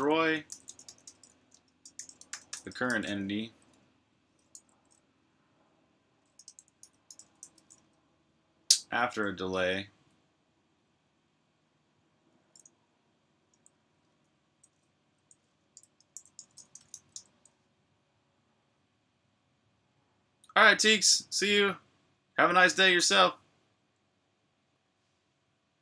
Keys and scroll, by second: 0.0-4.3 typing, 6.0-7.5 typing, 8.9 0, 16.1-17.2 typing, 25.6-25.8 typing.